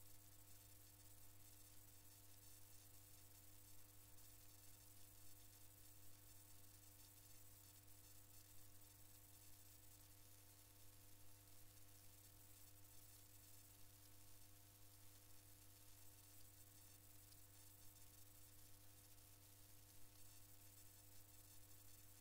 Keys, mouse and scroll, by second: 4.4 ctrl+KP_6, 8.4 ctrl+KP_6, 9.5 ctrl+KP_6, 13.1 ctrl+KP_2, 18.0 alt+KP_5, 21.8 alt+KP_3.